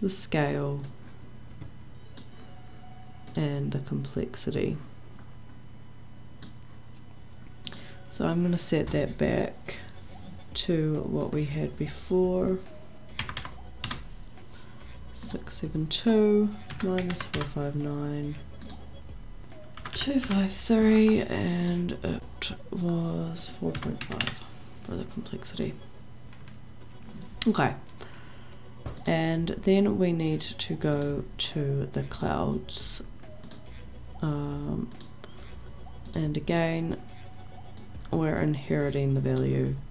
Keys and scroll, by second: 13.2 KP_6, 13.3 KP_7, 13.8 KP_2, 17.1 KP_5, 17.3 KP_9, 19.7 KP_2, 19.9 KP_5, 20.2 KP_3, 23.7 KP_4, 24.0 KP_Decimal, 24.2 5.